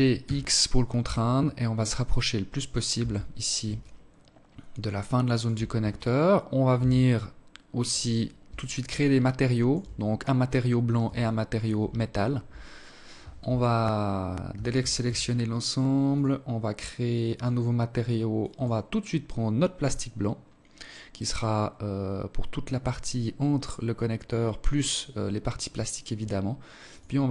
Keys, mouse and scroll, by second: 1.2-1.7 scroll down 4, 1.7 Tab, 2.5 alt+shift+click, 5.5 Tab, 5.9 scroll up 2, 6.1 scroll down 1, 7.5 alt+shift+click, 9.9 alt+shift+click, 13.2 a, 13.5 a, 13.7 a, 14.8 click, 16.0 click, 18.5 scroll down 5, 18.9-19.9 scroll up 4, 19.9-20.3 scroll up 1, 25.7 click.